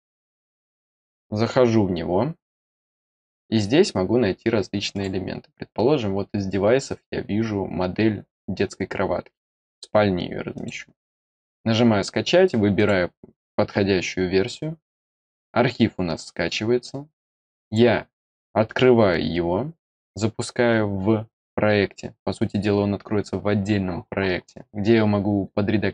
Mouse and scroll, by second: 0.5 click, 4.9 click, 10.5 click, 12.7 click, 17.6 click.